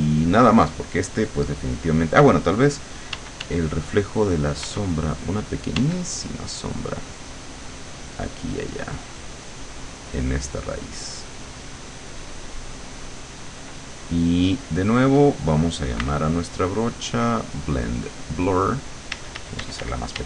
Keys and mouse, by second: 3.2 d, 4.7 f, 5.9 d, 6.2 click, 8.1 click, 9.8 click, 11.7-13.5 drag, 16.1 b, 17.3 click, 18.3 click, 19.2 d.